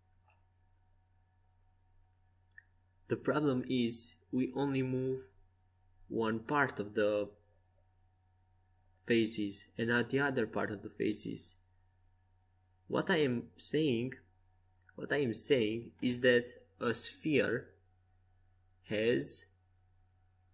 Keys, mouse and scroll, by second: 3.3-5.7 right drag, 4.7 x, 7.5 right click, 8.5-12.8 drag, 10.9 x.